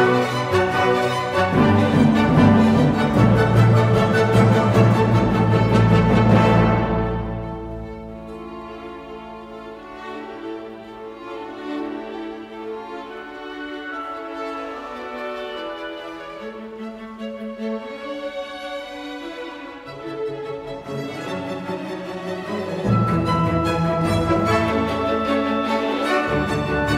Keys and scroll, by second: 0.0 typing, 6.9-9.9 typing, 14.9-16.5 typing, 17.6-19.2 typing, 21.9-22.7 typing, 23.1 Return, 24.4 typing.